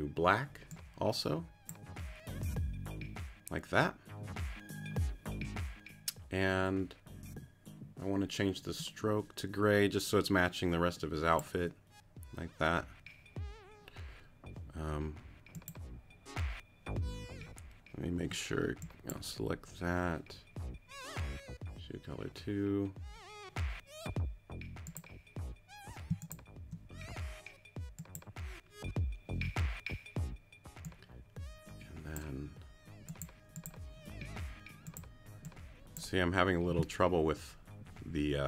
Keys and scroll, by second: 18.2 q.